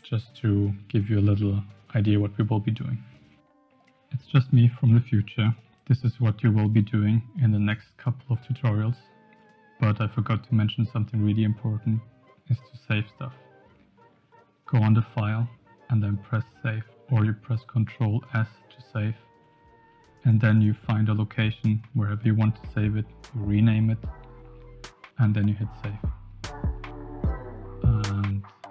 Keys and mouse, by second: 19.0-28.7 drag.